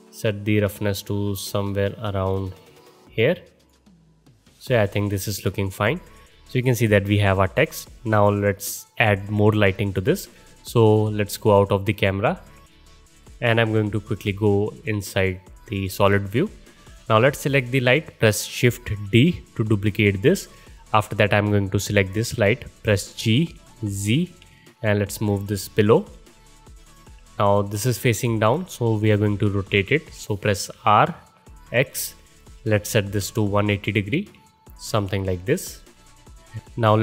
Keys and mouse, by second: 0.7-3.7 drag, 3.7-9.0 middle drag, 9.0 click, 9.2-14.3 middle drag, 12.3 KP_0, 14.3 click, 14.4-19.2 middle drag, 19.1 shift+d, 23.1 g, 27.3-35.3 alt+middle drag, 30.7 r, 35.3-37.0 alt+drag.